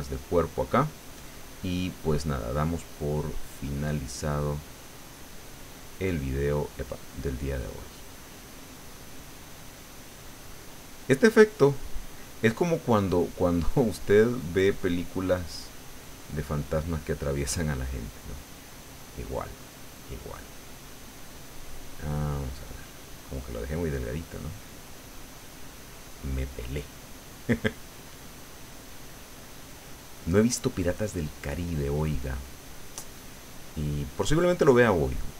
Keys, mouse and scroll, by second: 0.4 middle click, 1.8-4.7 drag, 4.9-5.9 middle drag, 6.2-7.3 middle drag, 7.3-11.1 drag, 11.2-12.4 drag, 13.1 click, 14.1-16.6 drag, 16.8-19.3 drag, 19.3-20.5 scroll up 1, 20.6-21.7 drag, 21.9 click, 22.8-23.8 drag, 24.1-25.7 drag, 25.7-35.3 drag.